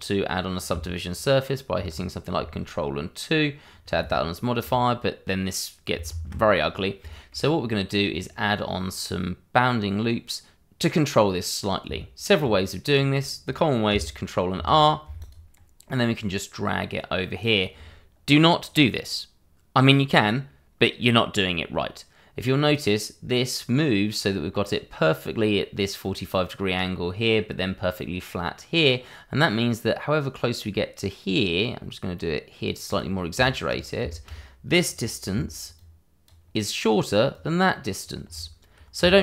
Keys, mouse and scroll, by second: 1.7 ctrl+2, 6.1 ctrl+z, 6.6 scroll up 1, 7.1 shift+middle click, 7.5-8.5 scroll down 1, 11.8 Tab, 12.8-13.9 scroll up 1, 14.5 ctrl+r, 15.2 click, 32.8 click, 33.4 shift+middle click, 33.7-34.0 shift+scroll up 2, 34.0 shift+middle click, 35.3 d, 35.7 click, 37.3 click, 39.1 ctrl+z.